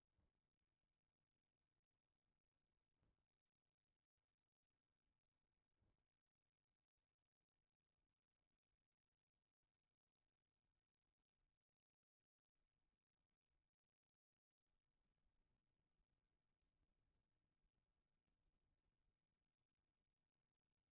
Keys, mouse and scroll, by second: 0.0 s, 2.2 KP_1, 2.7 KP_0, 3.2 KP_0, 4.4 KP_Enter, 6.5 shift+middle click, 14.1 click, 16.0 click, 18.9 click, 19.4-20.9 drag.